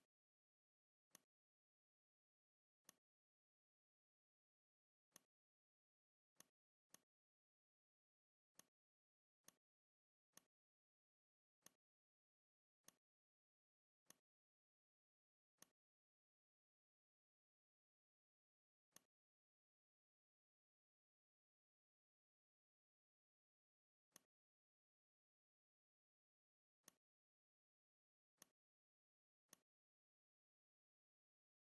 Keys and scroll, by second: 5.9 z, 6.6 space, 7.7 v, 10.1 shift+space, 13.7 z, 15.0 v, 18.5 r, 21.7 ctrl+x, 23.7 v, 25.5 ctrl+b.